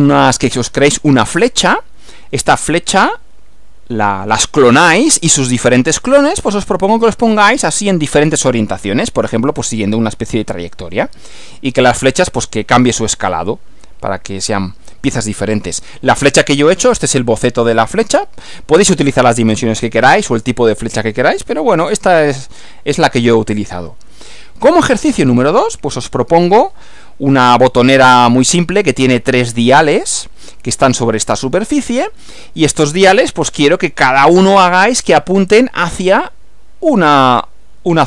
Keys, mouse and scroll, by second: 15.7 Right, 24.5 Right.